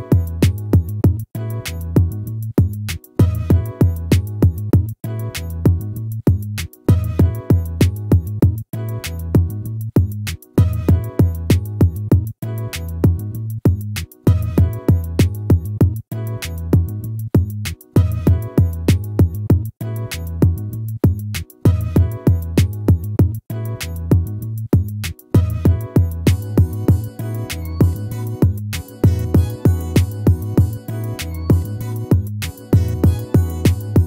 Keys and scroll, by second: 11.2 ctrl+-.